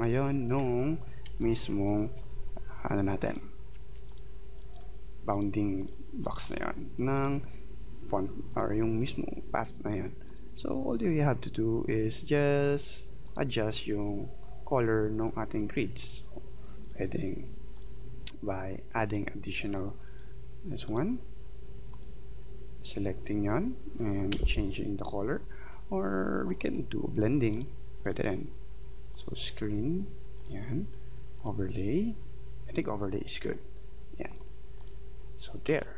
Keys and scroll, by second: 24.3 x, 35.7 space.